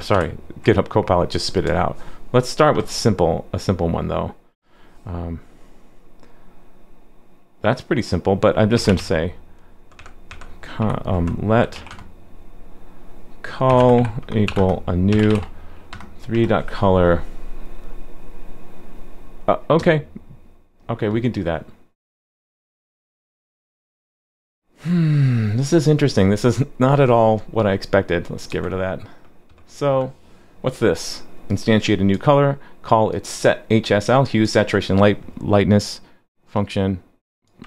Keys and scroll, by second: 0.1 super+/.